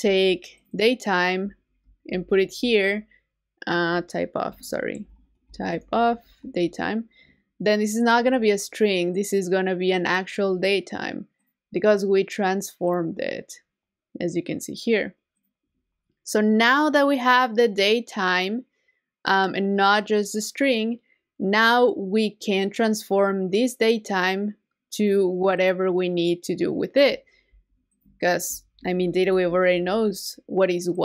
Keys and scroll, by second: 2.2 super+v, 6.2 super+v, 27.5 super+c, 29.3 shift+super+v.